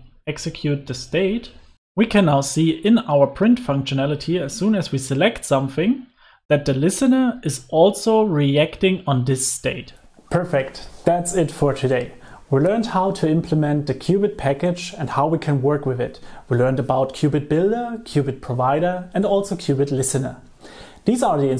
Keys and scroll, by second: 1.3 alt+shift+Right, 1.7 super+s, 3.6 super+s.